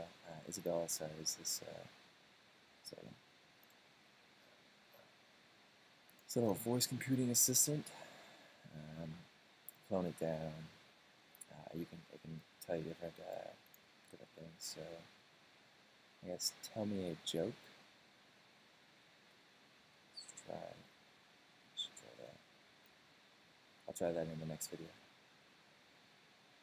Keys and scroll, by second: 20.0 super+space, 20.2-20.8 typing, 21.1 super+space, 22.8 super+space, 23.2 i, 23.7 BackSpace, 24.1 super+space.